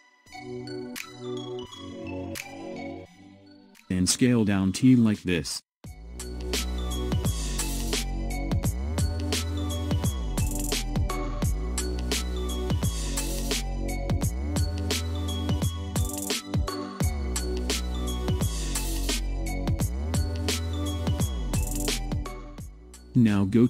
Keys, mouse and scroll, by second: 0.3 scroll up 5, 1.4-3.5 shift+middle drag, 3.5 s, 13.5 click, 20.8-23.6 middle drag.